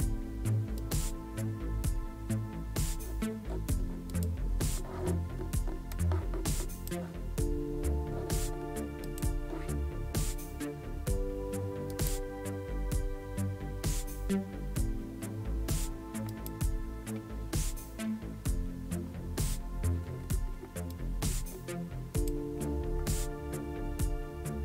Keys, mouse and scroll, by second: 0.8 click, 4.1 click, 5.9-6.9 drag, 9.1 click, 11.9 click, 16.3 click, 20.9-22.3 drag.